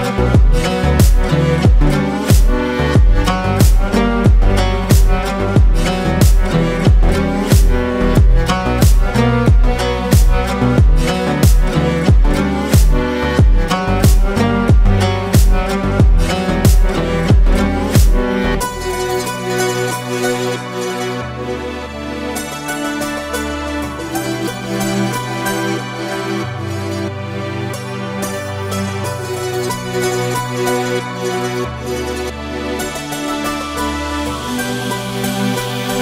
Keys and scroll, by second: 1.3 space, 2.6 ctrl+space, 9.0 shift+space, 9.5 ctrl+shift+space, 11.1 space, 13.8 i, 20.3 Delete, 21.3 o, 21.6 Return, 26.8 shift+space, 28.1 ctrl+shift+space, 33.2 ctrl+space, 34.8 ctrl+space.